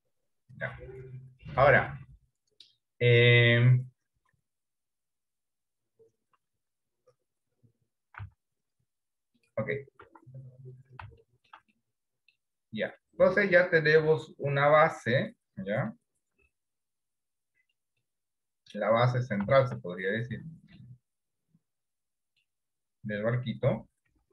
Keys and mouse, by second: 3.2 middle click, 4.3 KP_1, 8.2 s, 10.1 Tab, 11.4 middle click, 11.8 middle click, 13.1-15.4 middle drag, 16.0-18.0 middle drag, 18.2 middle click, 19.7 shift+middle click, 20.2 middle click, 22.0 middle click, 23.7 KP_1, 24.2 KP_3.